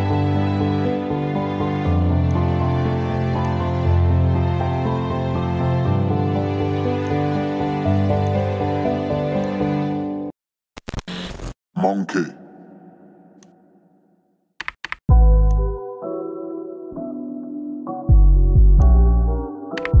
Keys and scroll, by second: 14.6 KP_2, 19.8 KP_Subtract.